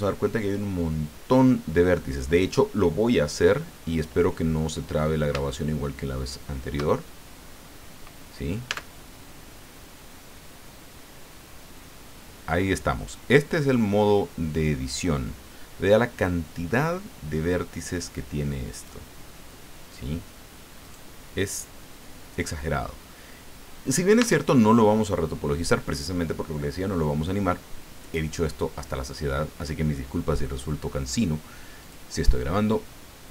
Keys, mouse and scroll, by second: 4.7-5.1 scroll up 2, 5.5 shift+click, 6.2 shift+middle click, 7.2 shift+scroll down 2, 8.7 Tab, 18.7 right click, 20.8 right click, 24.2 Tab, 31.0 click, 31.7 click.